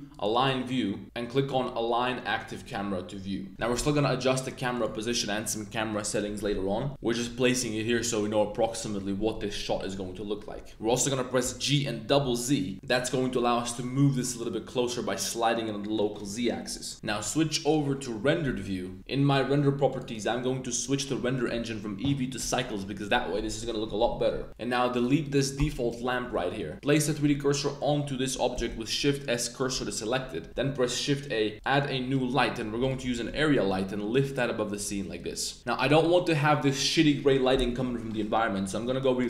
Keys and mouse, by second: 3.5 g, 3.7 z, 4.7 click, 10.7 super+z, 11.4 g, 12.2 z, 12.2 z, 16.9 KP_0, 17.6 click, 19.8 click, 20.9 drag, 21.4-22.4 drag, 24.9 click, 25.2 click, 25.5 x, 26.7 super+z, 27.0 click, 27.6 click, 28.6 shift+s, 30.5 shift+a, 33.1 g, 33.9 z, 34.7 click, 36.1 drag.